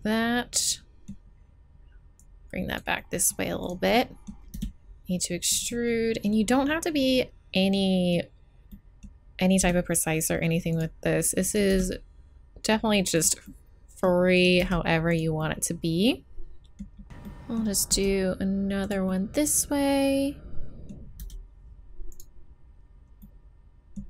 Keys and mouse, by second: 3.0 middle click, 3.6 right click, 4.5 e, 9.6 e, 11.7 e, 14.6 e, 17.0 right click, 17.9 e, 21.2 e.